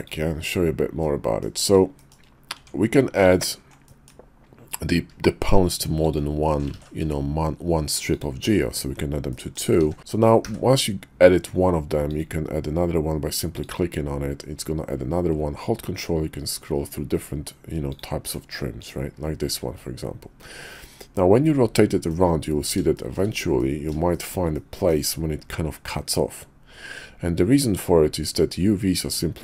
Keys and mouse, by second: 0.0 drag, 1.0-1.4 middle drag, 2.0 shift+middle click, 2.5 Tab, 3.9 middle click, 6.0 alt+shift+click, 6.8 ctrl+z, 8.1 alt+shift+click, 8.5 middle click, 9.3 middle click, 9.8 d, 10.4 d, 18.8 click, 19.5 middle click, 20.7-22.1 middle drag, 23.0 shift+middle click, 23.6 middle click, 24.1 shift+middle click, 24.5 middle click.